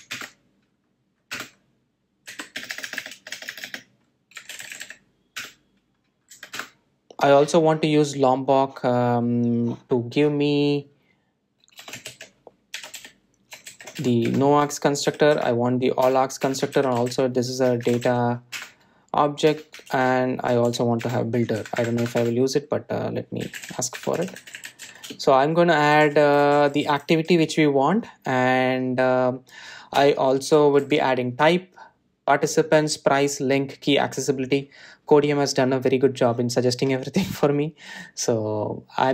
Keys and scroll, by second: 15.0 Return, 31.0 Tab.